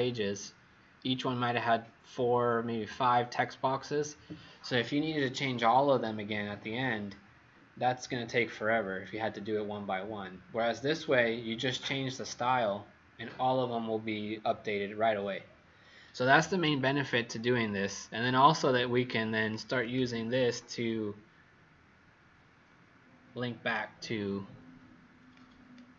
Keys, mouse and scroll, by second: 19.8 click, 25.2 click.